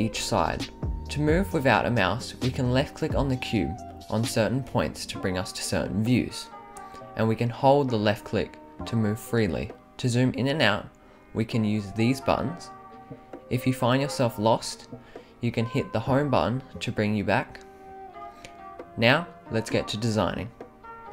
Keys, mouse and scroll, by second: 2.3 click, 4.6 click, 6.1-9.4 drag, 10.1 click, 10.4 click, 11.2 click, 11.4 click, 12.4 right click, 13.0-13.4 right drag, 13.8-14.1 right drag, 14.6 middle click, 15.1 middle click, 15.6 middle click, 15.9 middle click, 17.5 click.